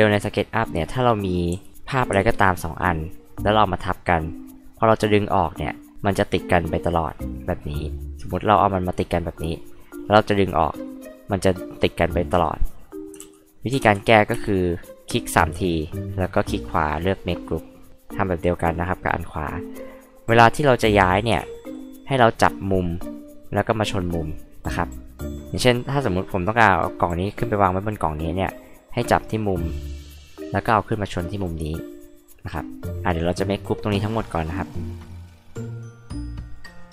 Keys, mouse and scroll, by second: 0.5 click, 1.5 h, 2.1 m, 2.4 click, 3.8 click, 5.0 click, 8.3 click, 9.4 click, 10.8 click, 12.8 click, 13.2 ctrl+z, 13.8 ctrl+z, 14.3 space, 14.8 click, 15.0 click, 18.7 click, 20.0 click, 21.3 m, 22.7 click, 27.3 click, 28.9 click, 29.8 click, 32.1 click, 34.5 right click, 35.7 click, 35.9 scroll up 2, 36.1 click, 36.3 click, 36.4 click, 36.7 right click.